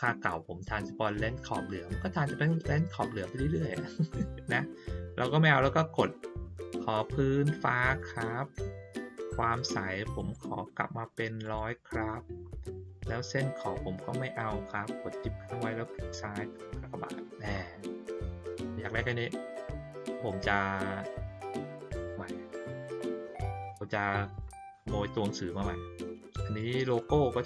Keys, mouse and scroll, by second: 7.8 click, 10.1 right click, 11.4 click, 15.9 shift+click, 19.7 ctrl+middle click, 20.5 ctrl+middle click, 20.5 ctrl+scroll down 1, 21.0 middle click, 23.5 click, 24.3 click, 24.7-26.5 drag, 26.9 middle click.